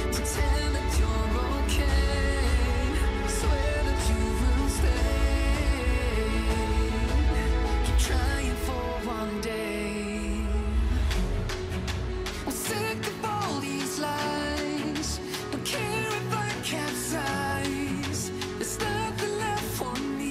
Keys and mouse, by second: 0.4 click, 1.7 middle click, 3.0 click, 3.5 click, 4.3 click, 4.9-5.2 middle drag, 6.2 middle click, 6.8 middle click, 7.3 click, 7.7 click, 8.4 click, 8.6 middle drag, 9.8 middle click, 10.4 middle click, 10.8 click, 11.2 click, 11.7 middle click, 12.8 click, 13.9 middle click, 14.5 click, 15.0 middle click, 15.5 middle click, 16.5 click, 16.8 click, 17.1 middle click, 18.2 middle click, 19.6-20.3 drag.